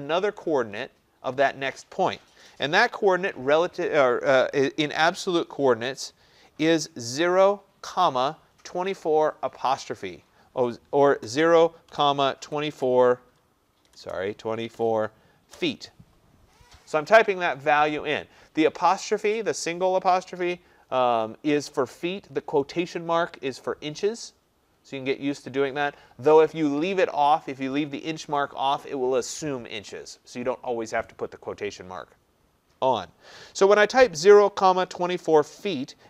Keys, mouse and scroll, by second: 11.3-12.8 typing, 13.9-15.6 typing.